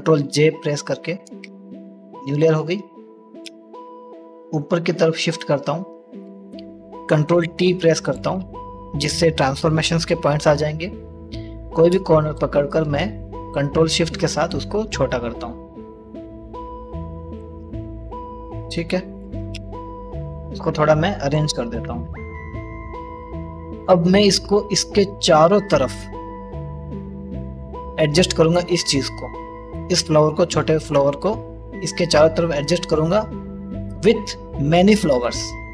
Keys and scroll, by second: 0.0-0.7 typing, 7.2 c, 7.8 ctrl+t, 14.0 s.